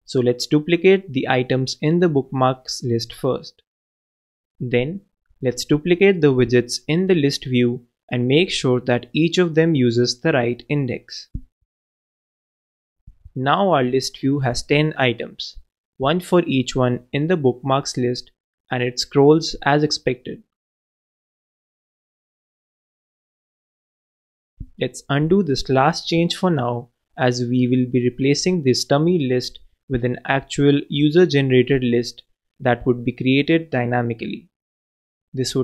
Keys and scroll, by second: 5.4 super+d, 8.6 super+d, 14.6 super+9, 15.4 super+s, 25.9 shift+super+BackSpace, 26.7 super+BackSpace, 29.8 shift+super+BackSpace, 30.5 super+s.